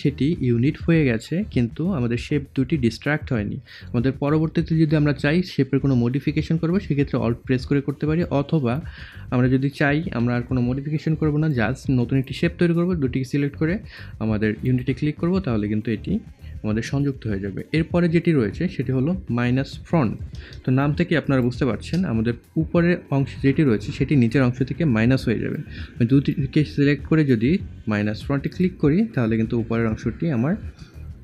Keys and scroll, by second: 9.5 ctrl+z, 20.9 scroll.